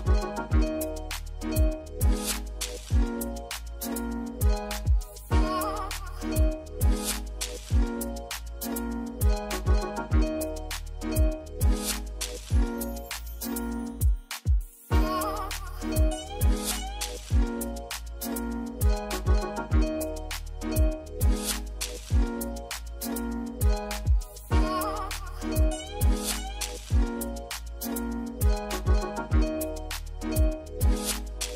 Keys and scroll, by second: 1.6 j, 13.4 ctrl+c, 13.6 ctrl+v, 27.6 a.